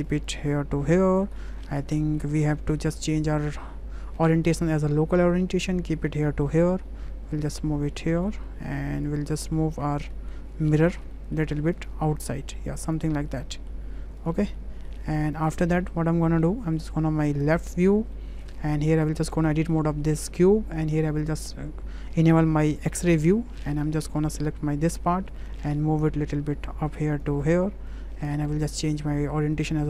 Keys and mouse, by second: 0.1 click, 0.3 click, 1.5 middle drag, 2.0 shift+middle click, 2.3 middle click, 3.3-4.8 drag, 5.4 click, 6.6 middle drag, 7.6 click, 8.3-8.8 middle drag, 9.0 click, 9.5 shift+middle drag, 9.8 Tab, 10.9 a, 11.1 click, 11.8-12.9 drag, 13.4 middle click, 14.3 Tab, 14.6 drag, 15.3 click, 16.2 `, 18.1 shift+drag, 18.9 Tab, 19.6 shift+click, 21.1 click, 22.9 shift+click, 23.8 1, 24.2 click, 25.4-26.9 drag, 27.2 click, 28.9-29.8 drag.